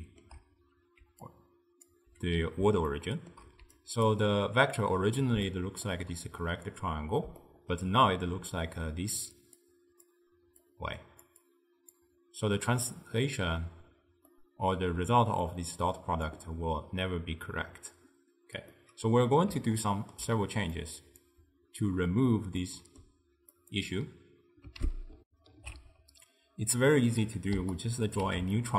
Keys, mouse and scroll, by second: 1.1 d, 1.3-1.9 drag, 1.9 d, 3.0-3.7 shift+middle drag, 3.7 d, 3.8 right click, 4.1-5.2 d, 5.5-8.4 shift+middle drag, 8.4-12.6 typing, 8.9-9.3 drag, 9.6-10.1 drag, 10.7 click, 11.5-12.0 drag, 14.4-15.5 middle drag, 15.5 click, 18.8-20.9 middle drag, 20.9 click, 22.7-23.6 middle drag, 23.6 click, 25.3 ctrl+alt+shift+w, 25.6 ctrl+alt+shift+q, 27.6 d, 27.8-28.6 right drag, 28.6-28.7 shift+middle drag.